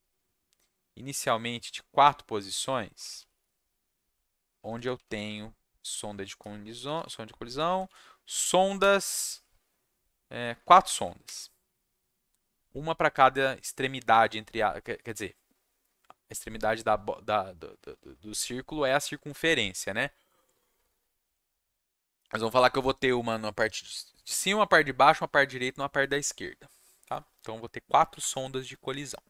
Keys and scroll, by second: 2.6-8.6 typing, 10.8 4, 11.2 /.